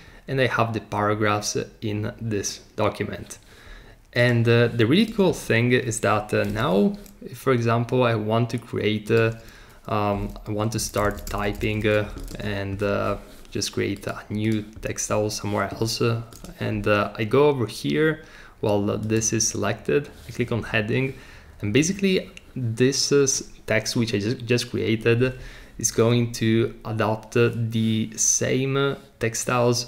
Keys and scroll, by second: 6.5 t, 10.5-12.3 typing.